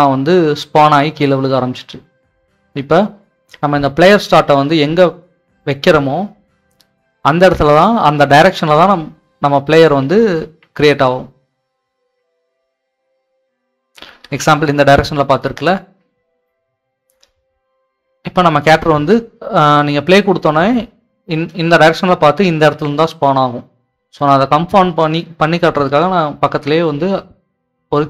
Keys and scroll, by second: 6.2-12.8 typing, 14.8-16.4 typing, 17.6-18.3 typing.